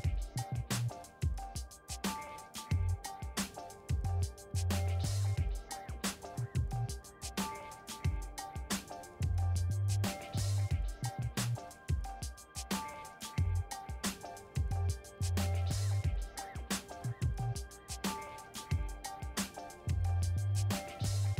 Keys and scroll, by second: 16.9 g.